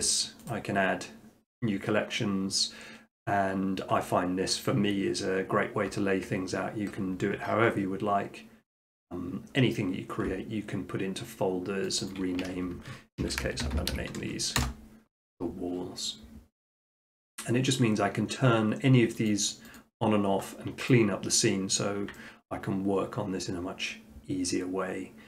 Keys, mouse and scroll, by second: 0.5-1.6 right drag, 11.9 click, 12.1 click, 13.2-13.9 typing, 14.6 Return, 19.3 click, 19.8 click, 22.5-23.5 middle drag.